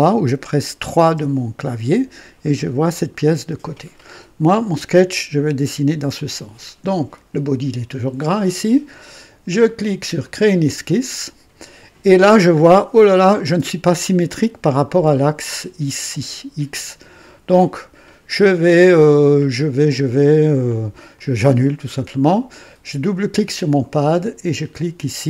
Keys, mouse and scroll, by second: 1.0 KP_3, 10.2 click, 12.5-12.8 scroll up 1, 21.1 click, 22.9 click.